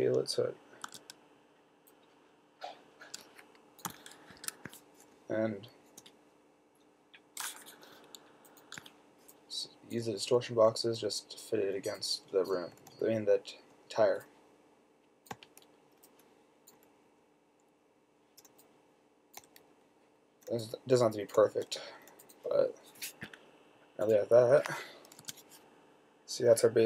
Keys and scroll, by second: 1.1 s, 4.6 Escape, 5.6 shift+Left, 6.0 shift+Left, 10.5 shift+Left, 10.7 shift+Left, 10.9 shift+Left, 11.3 Down, 13.1 Left, 13.5 Left, 15.7 Right, 17.1 Left, 18.0 Left, 19.7 shift+Left, 19.7 Up, 21.8 Down, 24.3 shift+Down, 25.5 t.